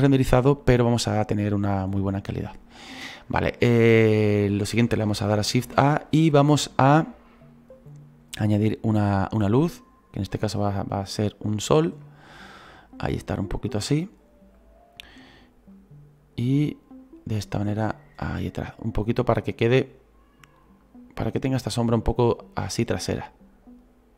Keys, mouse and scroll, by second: 3.5 right click, 4.0-4.5 scroll up 1, 4.5-5.6 scroll down 1, 12.6-14.6 middle drag, 14.6-24.1 drag.